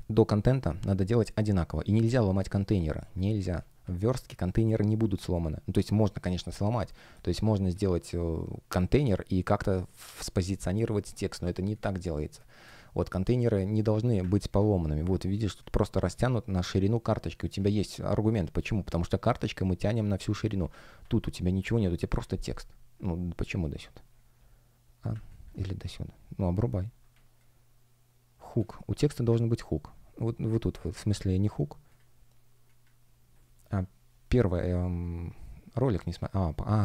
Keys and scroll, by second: 2.4 space, 7.0 space, 11.4 space, 27.0 space.